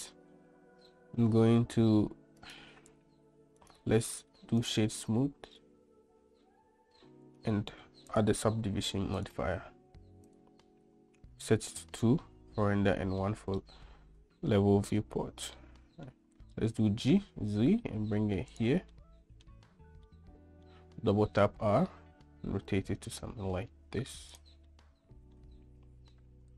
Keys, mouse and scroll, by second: 2.6-3.3 drag, 3.9 click, 8.3 click, 9.4-10.8 drag, 15.8-16.3 middle drag, 17.0 g, 19.2 middle click, 20.3-20.9 middle drag, 21.5 r, 24.9-25.6 middle drag.